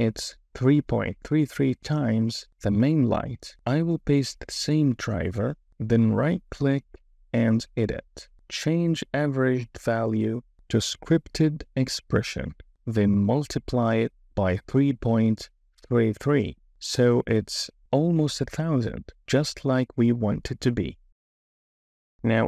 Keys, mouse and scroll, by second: 3.7-5.9 drag, 7.2-9.0 drag, 12.7-20.4 right drag.